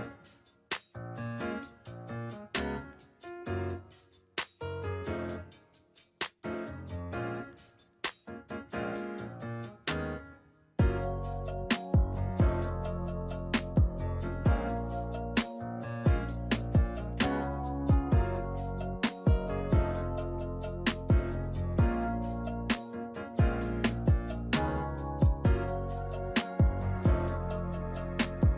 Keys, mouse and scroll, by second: 2.0 shift+middle click, 3.2 g, 5.0 shift+middle click, 7.0 ctrl+middle click, 7.8 shift+middle click, 8.1 middle click, 8.9 F2, 12.9 click, 14.3 click, 15.7 9, 17.2 click, 20.0 right click, 20.9 KP_5, 21.0 KP_1, 21.8 middle click, 22.6-23.3 scroll up 6, 23.5 middle click, 24.2 Tab, 25.1 z, 26.6 3, 27.5 alt+a.